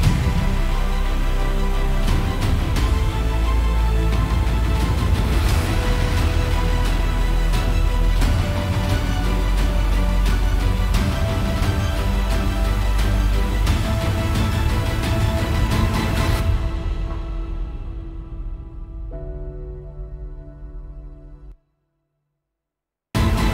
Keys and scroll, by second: 21.1 super+=, 21.8 F7.